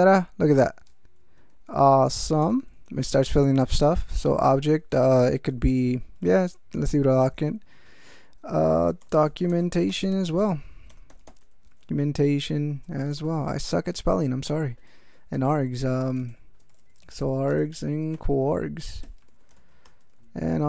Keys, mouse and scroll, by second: 1.3-3.0 typing, 3.8 Tab, 7.2 Tab, 8.3-13.7 typing, 14.4 Tab, 15.3-20.1 typing.